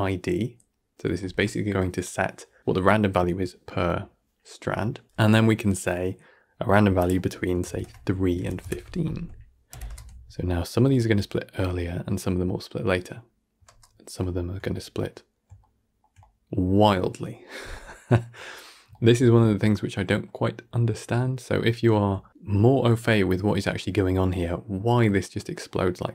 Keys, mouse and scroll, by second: 0.2 drag, 8.4-11.2 drag, 11.2 shift+Left, 11.3 shift+space, 15.3 shift+space, 15.6-16.2 shift+middle drag, 16.2-16.5 scroll up 4, 16.5-18.9 middle drag, 18.9 scroll down 3, 19.2-20.1 shift+middle drag, 20.1 scroll down 2, 20.4-22.7 shift+middle drag, 22.7-23.0 scroll down 1, 23.0-26.1 shift+middle drag.